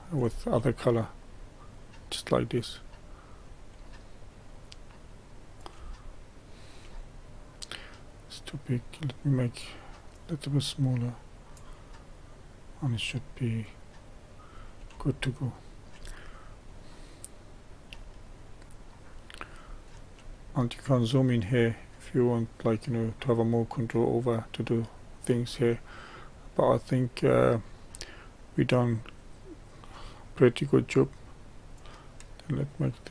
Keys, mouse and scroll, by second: 0.5-1.1 scroll down 1, 1.1-3.7 drag, 3.7-4.8 middle drag, 4.8-6.0 drag, 6.0-8.5 shift+middle drag, 8.5-15.1 drag, 15.1 shift+middle click, 16.1-16.7 scroll down 2, 16.7-18.4 middle drag, 18.4-25.7 scroll up 2, 25.7-28.8 middle drag, 28.8-33.1 drag.